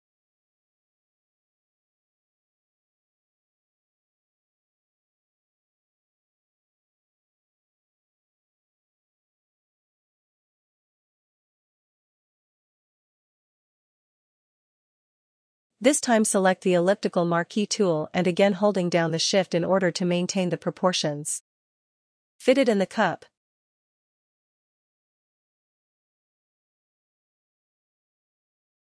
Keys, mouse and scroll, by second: 0.6 click, 2.8 click, 5.8 click, 8.0 click, 13.9 click, 17.4 click, 25.6 shift+click.